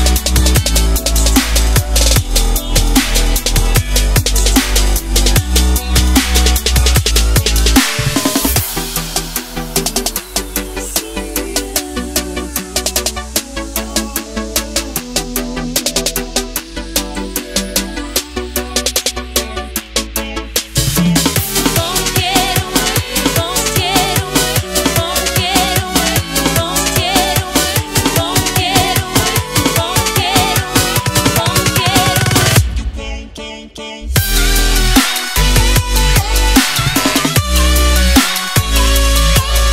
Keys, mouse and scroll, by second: 0.4 click, 2.8 click, 9.1 ctrl+s, 10.6 click, 18.2 ctrl+z, 19.7-21.0 scroll up 1, 21.0 click, 21.2 right click, 22.9 click, 24.1 ctrl+s, 25.3 click, 38.2-39.6 scroll down 1, 39.6 click.